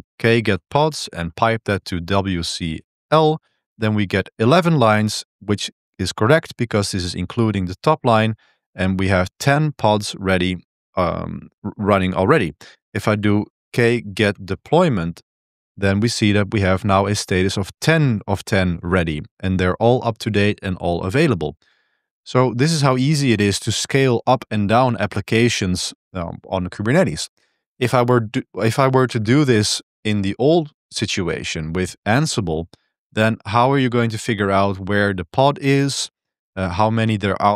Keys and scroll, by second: 0.0-2.9 typing, 3.4 Return, 10.5 _, 12.7-14.9 typing, 15.2 Return, 29.1 super+1.